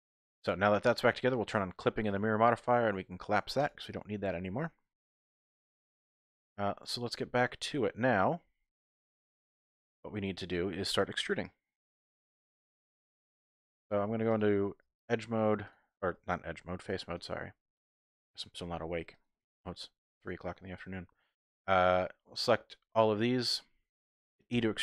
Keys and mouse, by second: 0.3 typing, 0.5 middle click, 1.9 click, 3.6 click, 4.2 Tab, 5.0 KP_1, 5.6 z, 7.2 z, 7.7 click, 9.4 shift+click, 9.8-11.0 drag, 12.8 4, 13.0 click, 14.1-14.4 typing, 14.9 shift+click, 15.6 shift+click, 18.3 shift+click, 19.2 shift+click, 20.3 shift+click, 20.6 click, 21.6 shift+click, 21.9 shift+click, 22.8 click, 24.5 e.